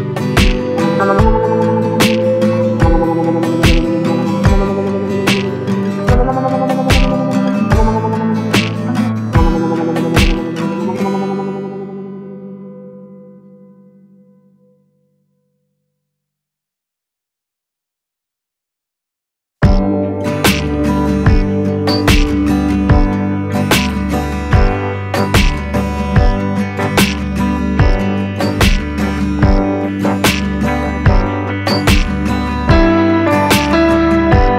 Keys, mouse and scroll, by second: 1.7-15.8 drag, 15.8 ctrl+space, 16.7-17.6 ctrl+scroll up 1, 18.0 scroll down 1, 20.8-21.1 scroll up 1, 21.4 space, 25.3-30.7 drag, 30.7-34.5 drag.